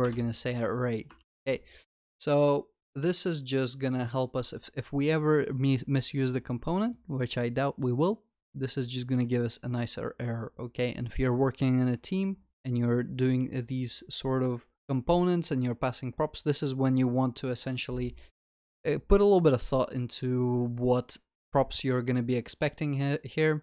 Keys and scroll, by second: 1.1 Return, 1.2 ctrl+s.